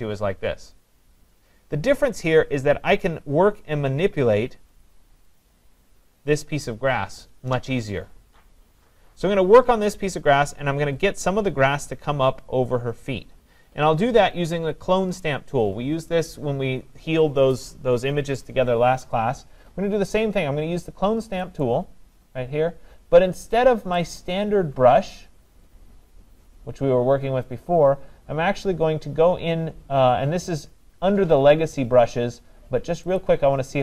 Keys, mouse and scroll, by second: 2.3 click, 4.8 click, 5.4 click, 21.7 click, 24.1 click, 33.2 click.